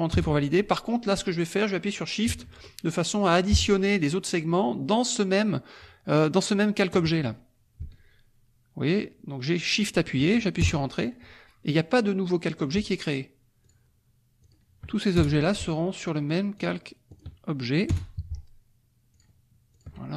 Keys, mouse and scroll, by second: 0.1 Return, 8.9 shift+click, 9.8 shift+click, 11.0 shift+Return, 13.6 shift+click, 14.4 shift+click, 15.2 shift+Return, 16.5 shift+click, 17.1 shift+click, 17.8 Return, 19.1 shift+click, 19.7 shift+click.